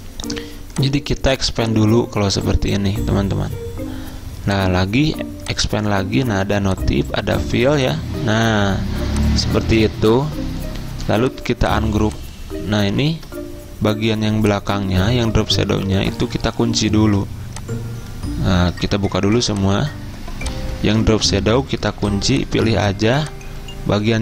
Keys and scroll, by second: 13.2 ctrl+z, 15.5 ctrl+z, 16.8 ctrl+2, 19.3 ctrl+alt+2, 21.2 ctrl+z, 22.0 ctrl+2.